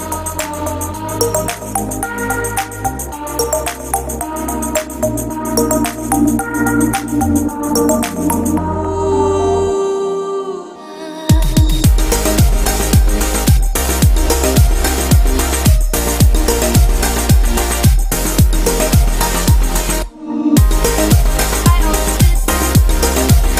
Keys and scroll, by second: 1.3 ctrl+alt+shift+e, 15.2 ctrl+t.